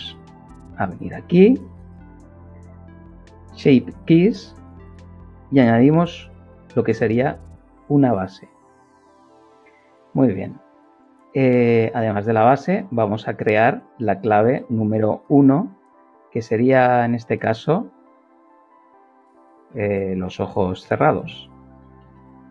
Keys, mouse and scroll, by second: 5.1 click, 12.3 click, 17.7 click, 17.9 click, 19.7 shift+b, 20.1 l, 20.9 n, 21.1 k, 22.0 Return.